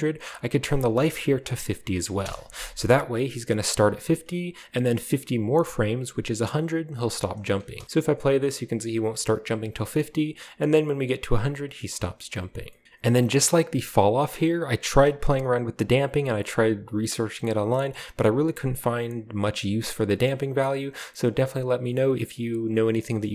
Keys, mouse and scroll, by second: 0.6 click, 1.8 typing, 2.2 Return, 3.5 click, 7.2-7.5 drag, 7.6 drag, 7.6 space, 7.9 click, 9.7 middle click, 12.2 middle click, 12.8-14.0 drag, 12.8 right click, 13.9 right click, 14.8 space, 15.7 click, 17.2 drag, 17.6-17.9 drag, 18.7-20.3 drag, 20.9 click, 22.7-23.0 drag.